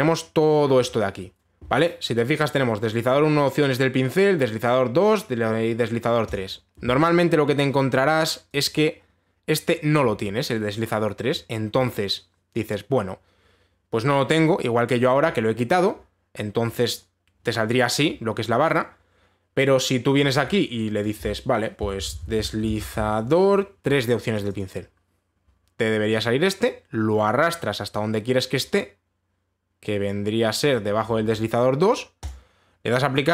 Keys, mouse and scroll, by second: 0.1 scroll, 0.9-1.5 scroll down 6, 1.4-2.0 scroll up 3, 6.9 click, 9.2 click, 9.4 click, 11.9-12.5 scroll, 17.4 click, 20.7-21.0 scroll down 3, 21.0-21.7 scroll up 1, 21.7 click, 21.7-22.5 scroll up 1, 22.2-24.1 typing, 23.3 scroll, 25.0 click, 25.2 click, 29.2-31.3 scroll, 31.3 click, 32.9 click.